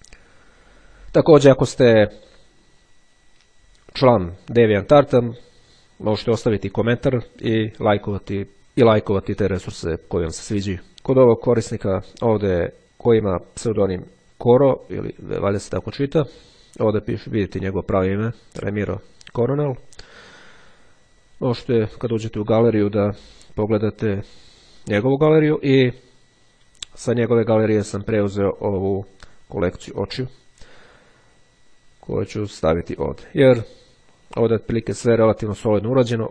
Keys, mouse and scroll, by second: 0.3-1.2 scroll up 1, 21.8 click, 25.2-25.8 scroll down 1, 27.7 click, 32.8 click, 35.8-36.3 ctrl+scroll up 2.